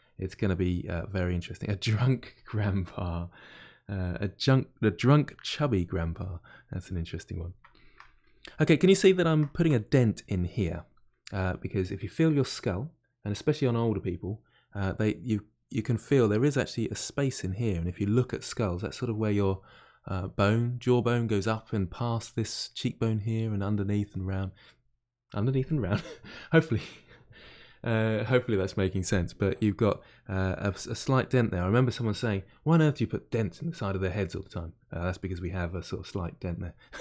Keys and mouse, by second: 0.3-1.5 middle drag, 1.5-2.8 drag, 2.8-4.9 middle drag, 4.9-6.2 drag, 6.2-9.9 middle drag, 9.9 click, 10.7-37.0 middle drag.